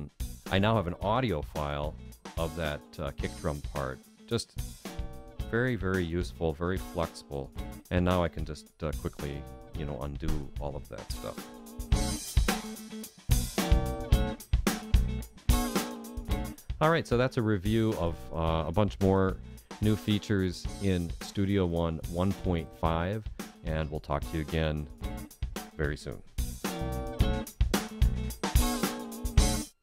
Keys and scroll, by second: 13.4 super+z.